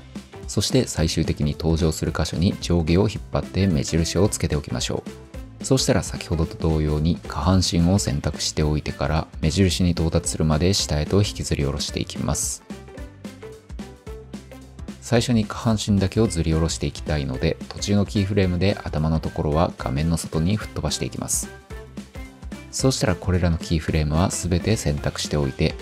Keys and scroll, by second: 22.9 F9.